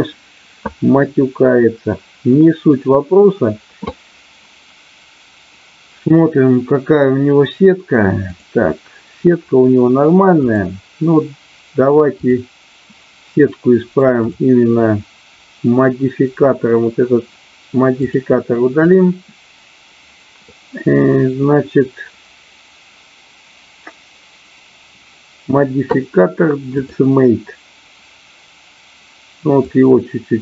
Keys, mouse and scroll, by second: 8.3 click, 12.3 click, 14.2 click, 17.9 click, 18.8-26.9 drag, 29.7-30.4 drag.